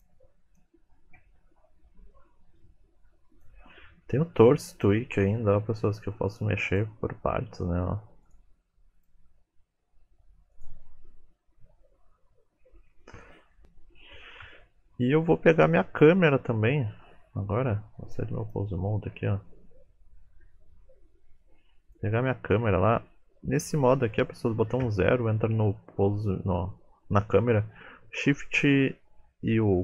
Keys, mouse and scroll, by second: 0.5 shift+click, 1.5-1.8 scroll down 1, 2.1 shift+middle click, 2.1-3.2 scroll down 3, 3.4 shift+click, 3.9-4.3 scroll up 2, 4.7 click, 5.4 g, 6.6 click, 7.1 g, 8.9 click, 9.2 g, 9.8-10.1 scroll down 6, 10.8 middle click, 11.0 scroll up 3, 11.2 click, 11.5 KP_3, 11.8 r, 12.8-14.1 scroll down 2, 12.9 middle click, 18.0 click, 19.0-19.9 scroll down 7, 19.9 middle click, 19.9-20.8 scroll down 2, 21.8 click, 23.6 middle click, 24.8 KP_0.